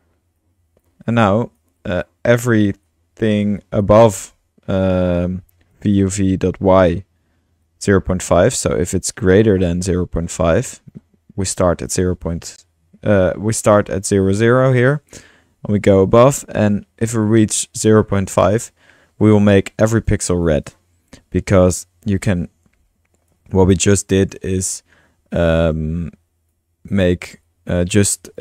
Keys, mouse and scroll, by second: 1.7 typing, 1.8 click, 2.6-3.3 drag, 3.3 middle click, 3.6-4.9 drag, 4.9 middle click, 5.7-6.1 drag, 7.7 click, 8.1 click, 8.8-10.3 drag, 10.6 click, 19.8-20.2 drag, 20.4-20.7 drag, 23.5-26.6 drag, 26.9 click, 27.4-28.0 drag, 28.2 click.